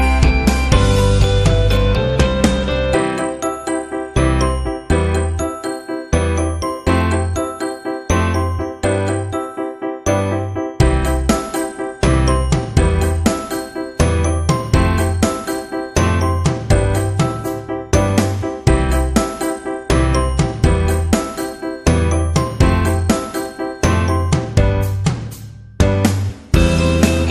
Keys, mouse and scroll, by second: 5.1 click, 5.8 click, 6.5 click, 7.4 click, 7.8 click, 8.5 click, 10.2 right click, 12.0 click, 13.2 click, 14.3 space, 14.7 click, 14.8 space, 18.7 space, 19.1 click, 19.2 space.